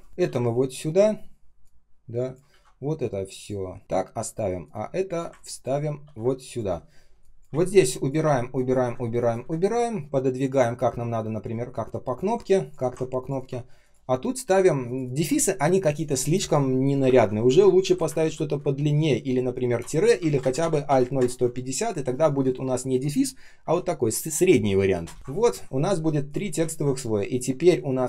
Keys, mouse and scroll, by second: 0.1 ctrl+click, 0.1 ctrl+v, 2.4 ctrl+x, 4.5 alt+click, 5.3 ctrl+click, 5.4 ctrl+click, 5.9 ctrl+v, 7.4 Delete, 8.1 Delete, 8.7 Delete, 9.3 Delete, 13.3 ctrl+click, 14.7 ctrl+click, 14.9 ctrl+click, 17.0 ctrl+alt+-, 17.7 shift+Left, 18.1 ctrl+c, 18.5 Right, 19.7 Return, 22.6 Return, 23.5 -, 25.0 BackSpace, 25.1 ctrl+v.